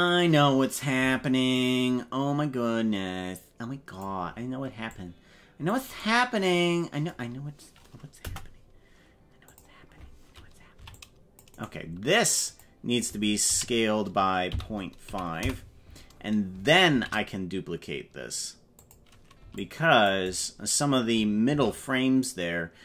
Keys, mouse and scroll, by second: 0.0 right click, 0.9 c, 8.1 Delete, 10.7 c, 12.4 click, 13.4 s, 16.8 shift+d, 19.3 c, 21.4 shift+d.